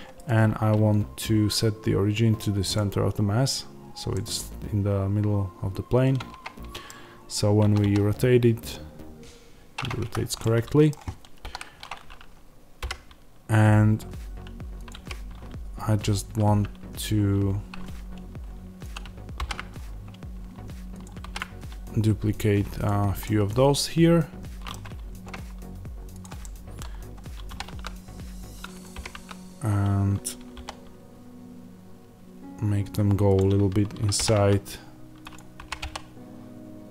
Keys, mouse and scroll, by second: 2.6-4.0 right drag, 4.0-14.8 middle drag, 6.9 scroll down 2, 7.0-7.5 scroll up 2, 7.5 r, 10.0 Escape, 11.3 KP_1, 12.7 g, 14.8 click, 14.8 g, 18.8 click, 19.3 alt+d, 20.9 click, 21.1 alt+d, 22.8 click, 23.1-26.1 middle drag, 25.3-26.1 scroll down 1, 26.1 click, 26.3-28.7 middle drag, 27.4 r, 28.7 click, 28.8 g, 32.8 click, 34.1 r, 35.2 click, 35.5 g.